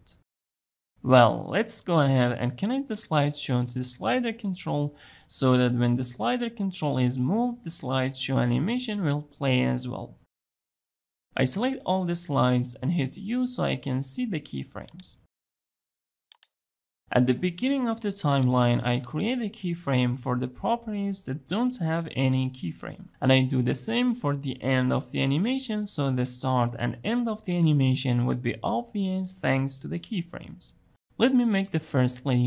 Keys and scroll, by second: 12.5 u.